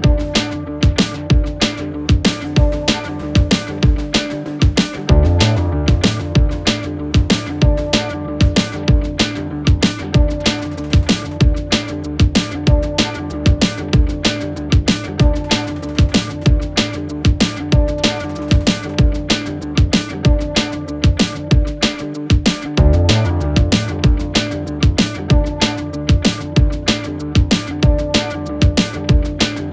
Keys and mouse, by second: 2.9 middle click, 3.9 middle drag, 4.6 shift+middle drag, 5.4-5.7 shift+middle drag, 7.5-8.4 drag, 10.7 middle click, 13.8 shift+click, 15.7-16.2 shift+drag, 16.6-17.1 shift+drag, 18.7 shift+middle drag, 24.5 click, 25.5 shift+d, 27.8 s.